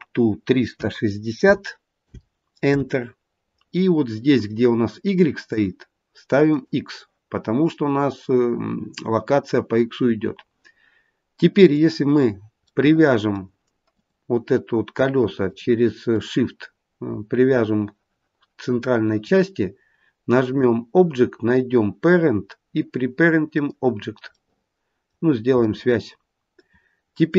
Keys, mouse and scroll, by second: 5.4 click, 11.5 click, 12.6 middle click, 13.8 click, 15.4 shift+click, 20.5 click, 24.3 middle click, 25.6 middle click.